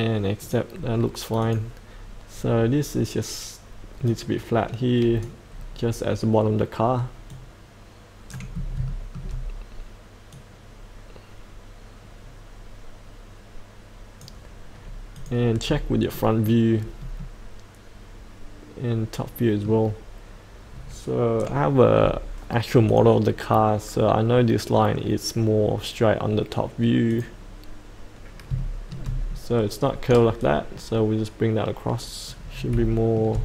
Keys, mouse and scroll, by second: 0.4-5.4 drag, 5.5 scroll down 1, 7.2-8.5 drag, 8.8 shift+middle click, 10.3-14.6 drag, 15.6-16.1 scroll up 1, 16.1 middle click, 16.7-17.2 scroll down 1, 17.2-19.7 middle drag, 22.9 click, 28.5 shift+middle click, 29.2-30.3 scroll down 1, 30.3-32.5 drag, 32.5 scroll up 1, 32.9 shift+middle click.